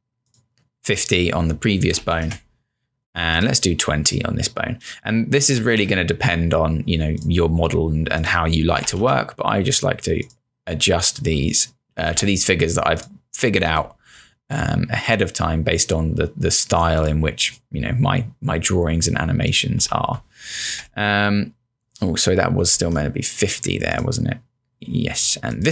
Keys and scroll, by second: 1.8-2.7 typing, 5.3-6.1 typing, 8.6-9.4 typing, 11.8-12.6 typing, 14.0-14.7 typing, 19.6-20.4 typing, 20.8 Return, 22.8 z.